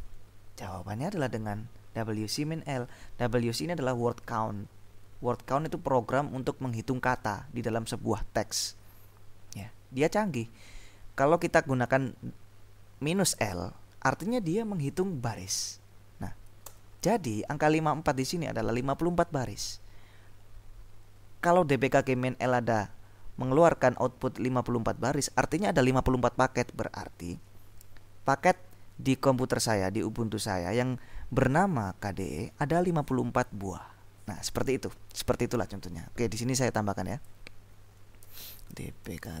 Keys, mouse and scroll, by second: 0.7 Up, 1.4 Up, 17.0 Return, 37.3 click, 38.3 Return, 38.6-39.4 typing.